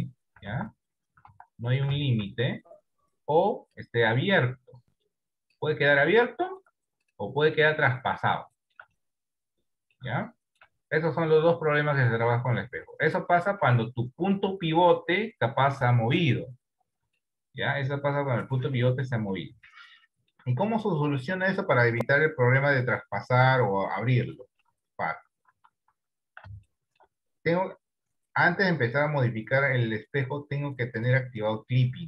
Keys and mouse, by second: 0.5 ctrl+z, 1.3 ctrl+z, 2.0 ctrl+z, 2.3 ctrl+z, 3.3 click, 5.1 click, 6.4 shift+middle click, 7.7 click, 8.6 shift+middle click, 9.2 middle click, 10.3 shift+middle click, 11.2-12.4 middle drag, 13.0 shift+middle click, 13.9 middle click, 17.2 shift+middle click, 18.3-19.4 middle drag, 19.7 shift+middle click, 20.8 middle click, 24.6 ctrl+z, 24.8 ctrl+z, 25.2 ctrl+z, 25.6 ctrl+z, 26.0 ctrl+z, 26.8 shift+middle click.